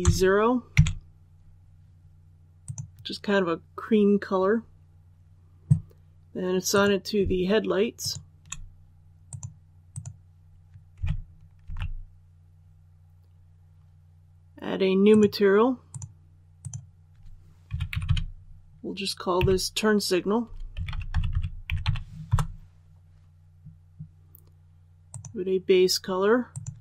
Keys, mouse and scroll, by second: 2.6 click, 6.7 right click, 7.9 shift+right click, 9.2 click, 11.6 alt+a, 15.0 click, 17.6 typing, 19.1-21.6 typing, 22.2 Return, 25.0 click.